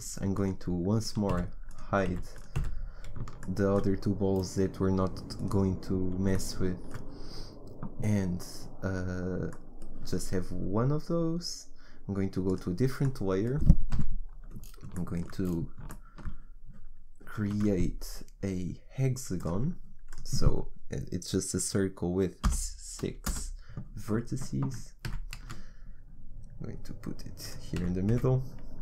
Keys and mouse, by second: 1.3 h, 2.1 h, 2.6 h, 6.1-7.2 drag, 9.6-11.3 middle drag, 12.5 click, 13.9 KP_1, 17.6 shift+a, 25.1 g, 27.8 g.